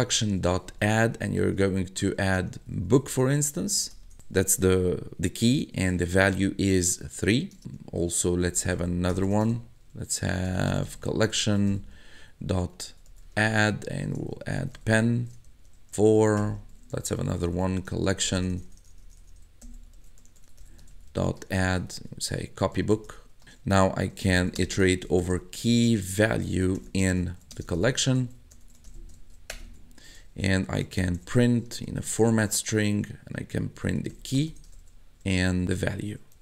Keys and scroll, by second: 0.0-4.2 typing, 6.4 3, 6.9 shift+0, 7.6 Return, 8.2-36.4 typing.